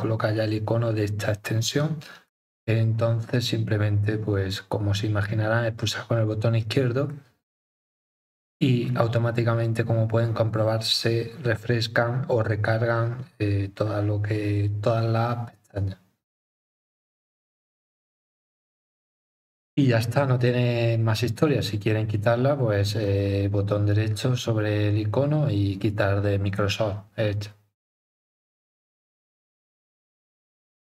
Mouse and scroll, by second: 2.3 click, 7.1 click, 23.0 right click.